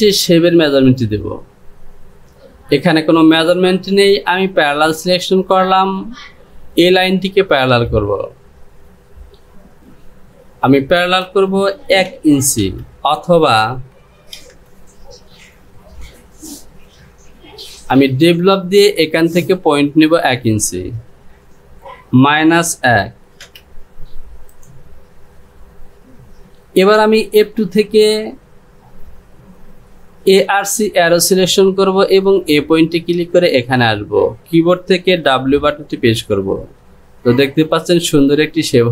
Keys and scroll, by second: 11.2 Down, 21.8 Down, 35.8 w.